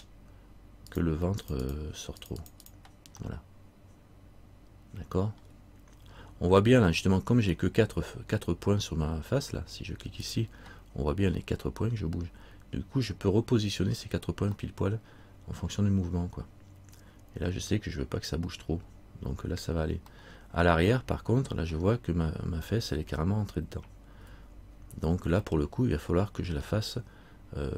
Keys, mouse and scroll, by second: 1.1 click, 2.4 click, 3.4 middle click, 4.6 middle click, 5.6-6.0 scroll down 1, 10.4 click, 14.8 middle click, 18.8-19.5 scroll down 1, 20.4 middle click, 24.4 z, 25.4 z, 25.6 middle click.